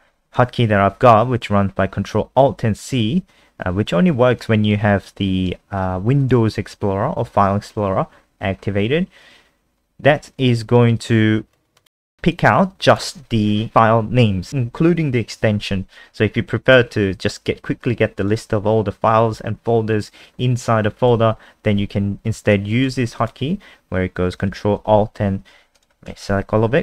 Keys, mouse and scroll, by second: 26.1 ctrl+a.